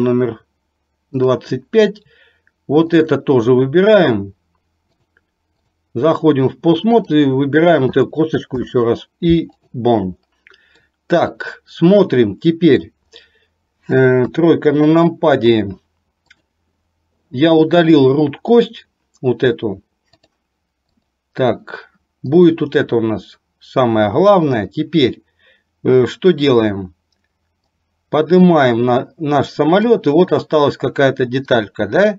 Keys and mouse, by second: 1.2 click, 5.2 click, 7.0 click, 8.7 ctrl+p, 11.0-12.8 middle drag, 14.2 KP_3, 16.4 click, 20.5 click, 22.4 click, 27.7-30.0 drag, 31.6-32.1 drag.